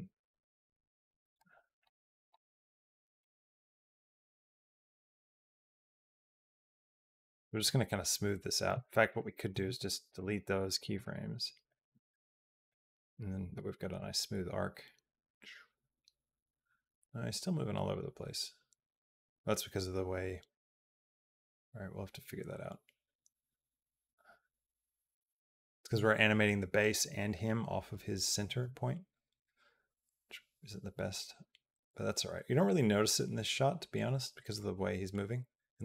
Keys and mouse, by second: 2.6 shift+middle click, 3.0 click, 3.3 click, 3.6 g, 6.1 click, 6.3 g, 8.5 click, 8.9 click, 9.4 x, 10.7 click, 11.7 g, 13.8-35.8 drag.